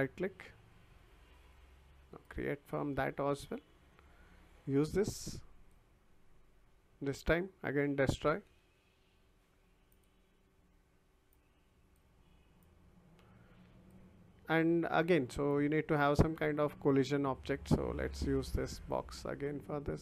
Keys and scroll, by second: 8.1-9.1 typing.